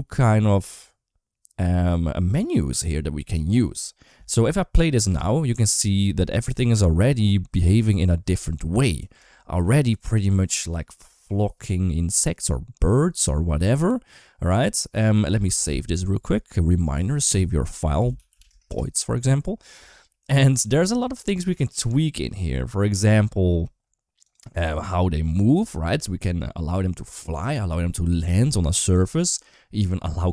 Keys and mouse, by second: 4.9 space, 7.1 KP_1, 9.2 shift+middle click, 15.1 space, 15.5 ctrl+s, 24.1 click.